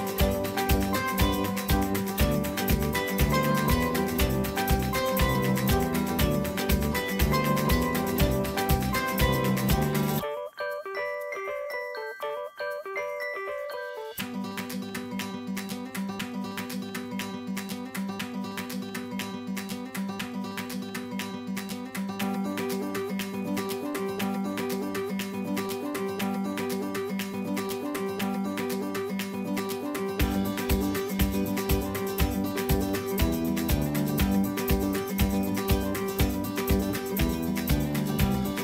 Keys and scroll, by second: 0.0-1.5 typing, 6.3-7.1 typing, 8.4-12.1 typing, 12.9 ctrl+s, 21.1 typing.